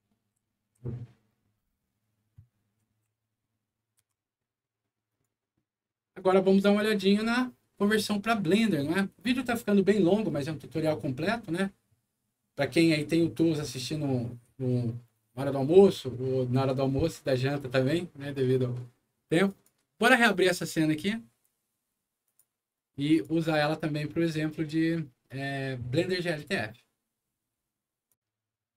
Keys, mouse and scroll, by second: 0.0-0.4 typing, 2.8 w, 3.9 Escape, 5.0 click, 6.1 click, 8.4 click, 19.4 click, 20.3 click, 22.2 click, 23.0 click, 28.0 click.